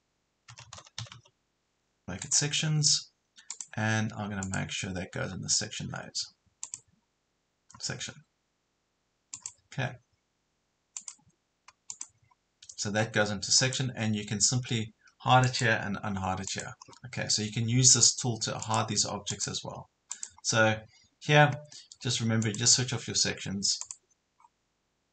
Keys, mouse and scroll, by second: 0.0-1.6 typing, 2.3 click, 16.9 scroll down 1, 18.7-21.2 drag, 24.4 scroll up 1.